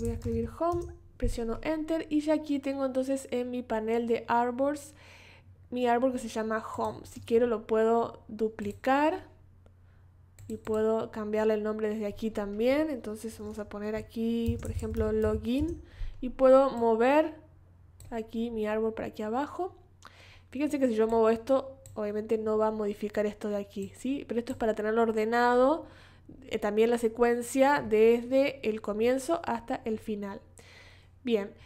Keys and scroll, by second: 0.0-1.2 typing, 14.2-15.3 typing.